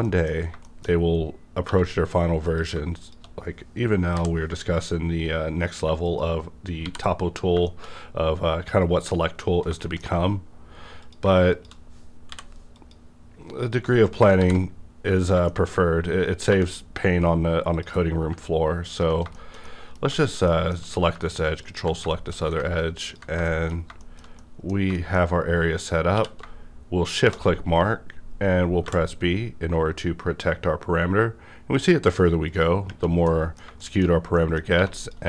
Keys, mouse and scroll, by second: 0.0 shift+middle click, 0.4-1.6 scroll up 2, 0.6 middle click, 1.6 1, 2.4 click, 2.5 click, 3.0 shift+click, 4.1 m, 5.6 click, 6.0 shift+click, 6.8 shift+r, 7.3 scroll down 1, 7.6 shift+middle click, 8.1-8.6 scroll up 2, 8.6-9.6 scroll down 2, 9.6 shift+scroll down 1, 9.7-11.0 shift+scroll up 4, 9.8 shift+middle click, 11.0 click, 11.5 shift+click, 12.3 m, 13.7 click, 14.0 shift+click, 14.4 shift+r, 14.7 scroll down 1, 15.5 shift+middle click, 15.8-16.5 scroll up 1, 16.5 2, 16.8 scroll down 1, 17.7 click, 17.7-18.3 scroll down 1, 18.9 ctrl+click, 19.3 middle click, 19.4 scroll down 1, 19.7 middle click, 20.2 shift+middle click, 20.2 shift+middle click, 20.5 shift+middle click, 21.6 ctrl+click, 23.0 ctrl+click, 23.5 shift+middle click, 24.0 shift+middle click, 24.4 middle click, 24.9 shift+middle click, 25.2 scroll up 1, 26.1 q, 27.1 shift+click, 28.9 b, 32.4 click, 32.5 click, 32.5 b, 33.2 middle click, 33.8 shift+middle click, 34.1 scroll up 1, 34.3 middle click, 34.7 1, 35.0 click.